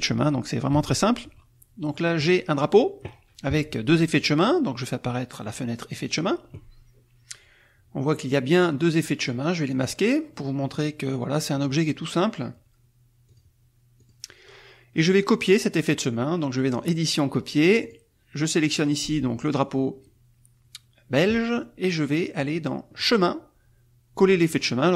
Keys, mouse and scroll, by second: 2.2 click, 4.1 click, 9.1 click, 9.6 click, 13.9 click, 16.7 click, 17.8 click, 18.5 click, 20.0-21.6 middle drag, 20.0-21.6 scroll up 1.